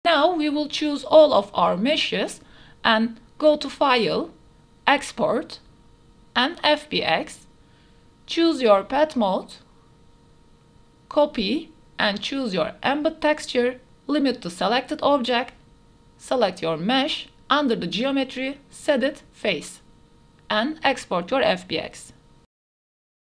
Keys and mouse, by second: 0.2 middle click, 0.9 middle click, 3.4-5.5 drag.